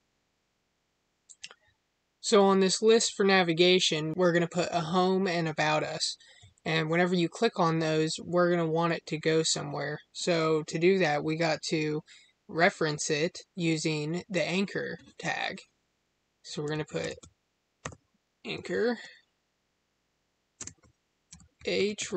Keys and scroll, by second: 20.5 space.